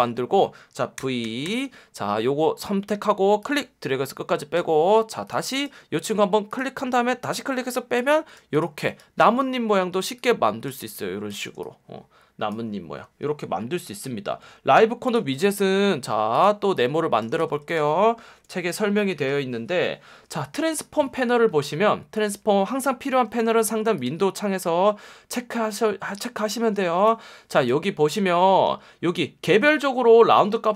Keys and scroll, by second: 1.0 v, 11.1 space, 12.8 space, 15.2 space, 17.3 v, 18.3 BackSpace, 23.7 F1, 25.6 Escape, 26.7 F1, 28.6 F1.